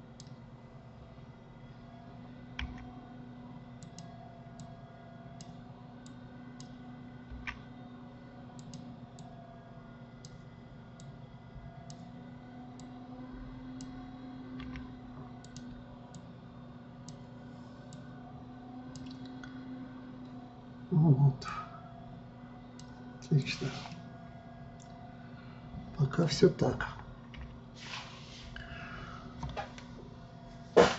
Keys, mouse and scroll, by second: 5.2-7.9 drag, 7.9 f, 9.8-15.2 drag, 15.2 f, 16.8-21.6 drag, 22.0-24.5 drag, 24.5-27.5 middle drag, 27.9 KP_3.